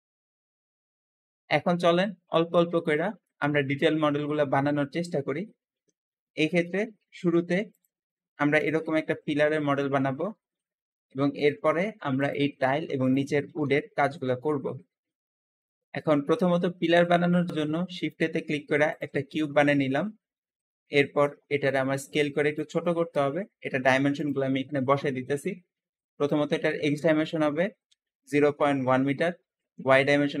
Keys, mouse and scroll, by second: 0.0-1.9 shift+middle drag, 1.9-2.8 scroll down 4, 2.8 shift+middle click, 3.5-4.2 scroll up 3, 4.2 shift+middle click, 5.1 scroll down 1, 5.3-7.6 shift+middle drag, 7.6 shift+click, 8.4 shift+click, 9.0 g, 9.1 g, 11.3 click, 12.1 click, 12.9 click, 13.4 g, 15.0 scroll down 2, 15.2 shift+middle click, 16.2-16.9 scroll up 3, 16.9 shift+middle click, 17.5 shift+a, 19.4-19.8 scroll down 2, 19.8-21.1 middle drag, 21.1-22.5 drag, 22.7-24.1 shift+middle drag, 24.1-27.2 shift+drag, 26.1 ., 27.8 KP_1, 27.9 KP_1, 28.6 Tab, 29.6-30.4 typing, 29.8 click.